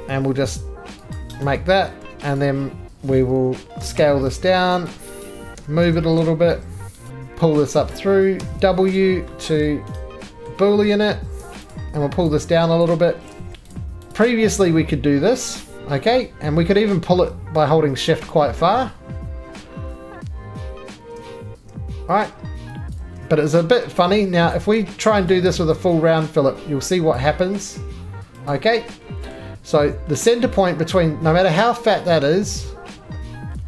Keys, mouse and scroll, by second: 0.9 click, 0.9 right click, 1.1 click, 1.4 right click, 2.0 2, 2.4 click, 3.8 s, 4.0 s, 4.9 click, 5.3 right click, 5.6 g, 5.9 shift+z, 7.1 click, 7.1 right click, 7.1 middle click, 7.1 3, 7.9 click, 8.8 scroll, 9.0 click, 9.0 w, 9.7 middle click, 9.9 scroll, 10.0 right click, 10.3 scroll down 1, 10.5-11.1 scroll down 1, 11.1 typing, 11.7 click, 12.8 click, 13.4 ctrl+z, 13.5-14.3 typing, 13.7 click, 13.8 click, 13.8 middle click, 14.1 shift+click, 18.7-20.7 shift+drag, 22.9 ctrl+click, 23.0 ctrl+z, 24.6 click, 25.3 shift+click, 27.2 click, 28.5 click, 33.4 middle click.